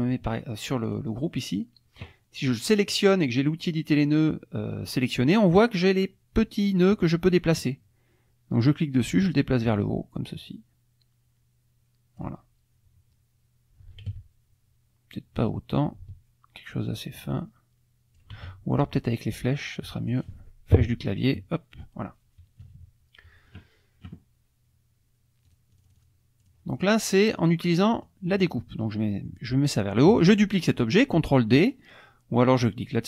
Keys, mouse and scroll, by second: 0.8 click, 8.6-12.4 drag, 14.1 ctrl+z, 15.4-18.4 drag, 18.3 ctrl+z, 18.9 click, 19.4 click, 20.1 click, 21.2 Up, 22.6 KP_Subtract, 25.5 click, 26.4 click, 26.7 click, 27.1 middle click, 28.0-30.5 drag, 30.0-30.5 scroll up 2.